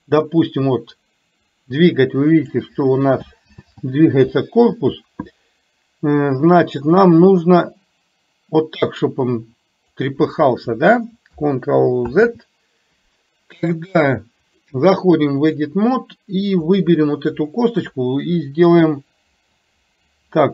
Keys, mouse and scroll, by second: 0.5 click, 0.8-2.6 drag, 14.5-15.9 drag, 16.8 click.